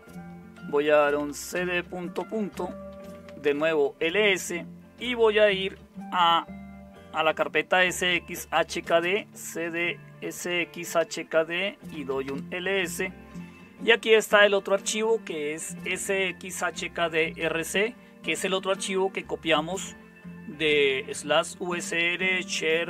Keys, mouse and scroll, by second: 0.5-3.8 typing, 8.3-12.6 typing.